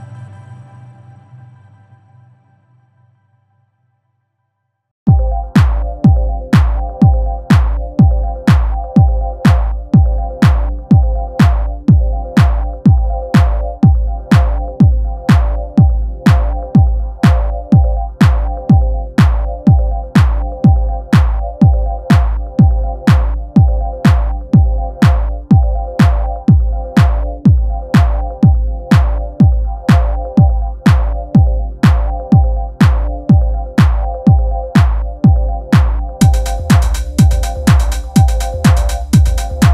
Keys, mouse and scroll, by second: 0.0 g, 0.3-0.8 scroll down 3, 0.3 middle click, 0.6 alt+click, 0.8 middle click, 1.0-4.1 typing, 1.4-1.9 scroll up 3, 1.4 middle click, 2.5 scroll up 1, 2.9 shift+middle click, 3.2 scroll up 1, 4.6 Tab, 4.6 middle click, 4.9 scroll up 1, 5.0 scroll down 2, 5.1-7.2 typing, 5.4 middle click, 6.0 middle click, 6.5 scroll up 2, 7.1 shift+middle click, 8.1 scroll down 1, 8.2 Tab, 8.5-12.3 typing, 9.0 scroll up 2, 9.7 scroll up 1, 13.3 middle click, 13.5 Tab, 13.6 middle click, 14.1 Tab, 14.3 shift+middle click, 14.6-17.1 typing, 14.9 click, 15.1 middle click, 15.9 middle click, 16.1 shift+click, 16.4 click, 16.6 middle click, 17.0 click, 17.1 middle click, 17.4 middle click, 18.4 click, 18.4-26.2 typing, 18.7 middle click, 18.9 shift+click, 19.4 click, 19.4 middle click, 19.9 middle click, 20.6 shift+middle click, 21.3 shift+middle click, 21.7 shift+click, 22.2 middle click, 22.4 shift+click, 22.9 shift+middle click, 23.1 shift+click, 23.3 middle click, 23.4 click, 23.7 click, 24.1 shift+middle click, 24.2 shift+click, 24.4 scroll down 3, 24.5 middle click, 24.8 middle click, 25.5 click, 25.6 scroll up 2, 26.6 shift+middle click, 27.1 click, 27.2 g, 27.5 Tab, 27.6 middle click, 28.0-28.4 scroll up 2, 28.0 middle click, 28.1 Tab, 28.2 shift+middle click, 28.4 3, 28.5 middle click, 29.1 click, 29.2 middle click, 29.4 click, 29.5 middle click, 29.9-32.3 typing, 30.6 scroll up 2, 31.1 middle click, 31.8 middle click, 33.0 middle click, 33.3 scroll down 2, 33.4 shift+middle click, 34.0 click, 34.2 scroll up 1, 34.3 middle click, 35.2 Tab, 35.5 l, 35.7 middle click, 35.8 g, 36.2 middle click, 36.3 scroll up 1, 36.4 shift+middle click, 36.8-39.7 typing, 36.9 click, 37.0 middle click, 37.3 middle click, 37.7 middle click, 37.8 click, 37.9 middle click, 38.3 scroll up 2, 38.4 middle click, 38.5 click, 39.2 click, 39.3 shift+click, 39.5 middle click.